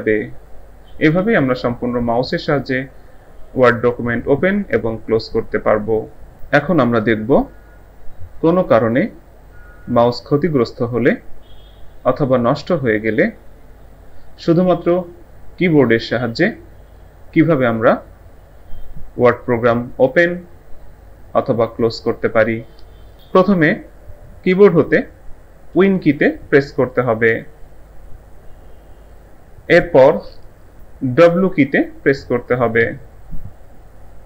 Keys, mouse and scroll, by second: 32.8 w.